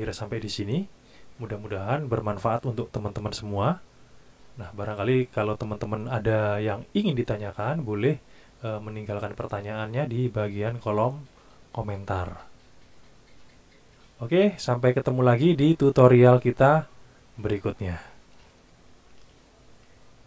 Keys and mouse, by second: 19.1 ctrl+shift+KP_1.